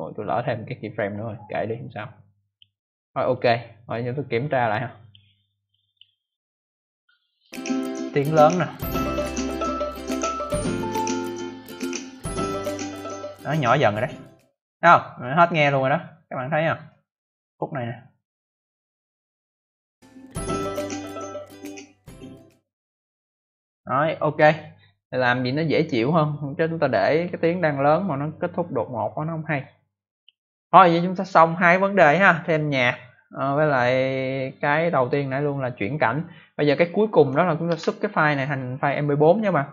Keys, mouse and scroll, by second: 1.0 click, 3.2 click, 4.3 click, 5.6 click, 7.4 click, 16.8 click, 18.3 click, 18.4 click, 18.6 click, 18.7 double click, 19.7 double click, 29.1 click, 37.6 ctrl+s.